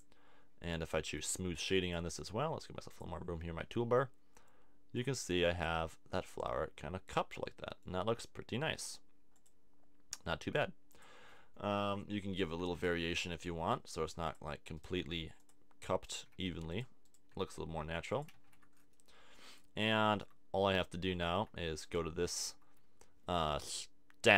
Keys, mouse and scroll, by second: 1.8 click, 5.8-8.1 drag, 12.6 Tab, 13.5 g, 15.1 g, 16.3 g, 17.3 g, 18.3 a, 18.4 Tab, 23.7 middle click.